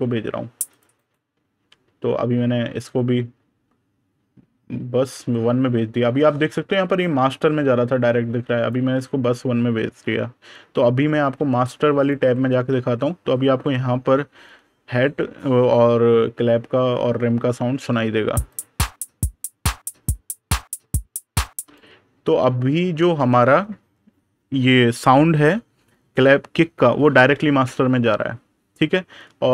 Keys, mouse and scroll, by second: 0.8 right click, 5.3 click, 9.1 super+KP_Subtract, 11.2 super+KP_Add, 11.8 click, 12.3 super+KP_Subtract, 18.3 click, 21.5 click, 22.3 super+KP_Add.